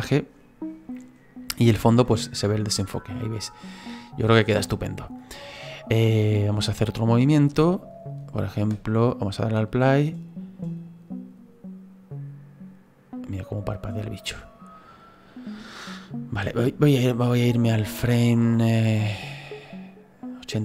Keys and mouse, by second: 6.7 click, 8.7 space, 16.4 space, 18.6 click.